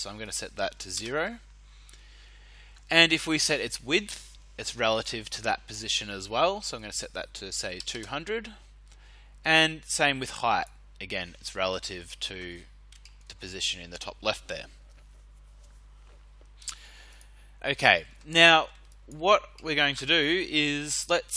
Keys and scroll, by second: 0.9 0, 7.2-8.2 typing.